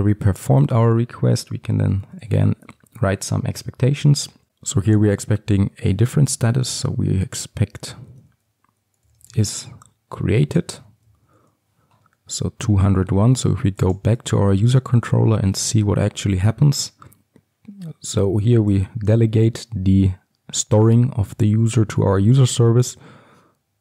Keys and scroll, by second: 2.8 Return, 10.4 Return, 14.0 ctrl+b.